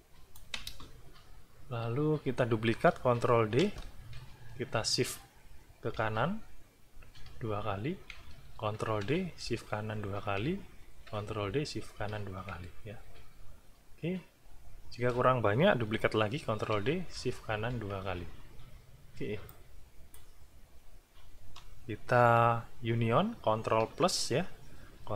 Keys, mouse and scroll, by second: 0.7 ctrl+space, 1.4-2.2 ctrl+scroll up 4, 2.7 ctrl+scroll down 2, 3.3 ctrl+d, 5.9 shift+Right, 7.2 shift+Right, 8.7 ctrl+d, 9.4 ctrl+shift+Right, 10.8 ctrl+shift+d, 11.4 ctrl+shift+Right, 13.5-13.8 ctrl+scroll down 2, 16.4 ctrl+d, 17.1 ctrl+shift+Right, 19.5 click.